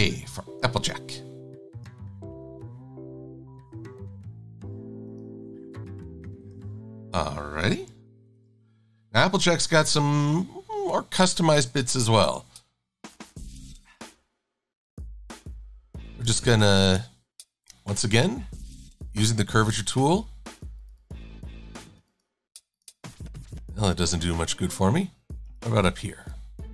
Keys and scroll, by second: 8.0 super+=, 8.3 super+=.